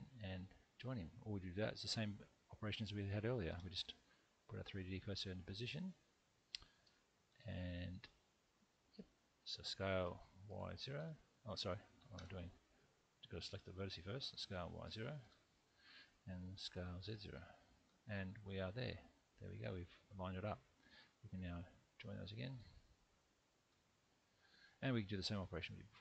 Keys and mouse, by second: 3.5 shift+/, 5.9 middle click, 10.0 s, 10.5 y, 11.0 0, 11.6 click, 12.1 Escape, 14.4 s, 14.9 y, 15.2 0, 15.6 click, 17.0 s, 17.3 z, 17.8 0, 18.1 click, 18.8-20.9 middle drag, 23.7 j, 24.1 middle click, 25.3 3, 25.9 click.